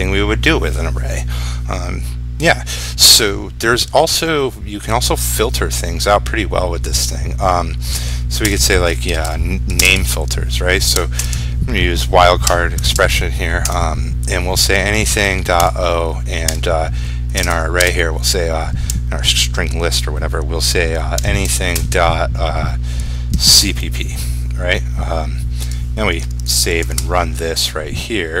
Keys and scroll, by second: 7.1 ctrl+shift+q, 9.9 ctrl+space, 26.3 ctrl+s, 27.0 ctrl+r.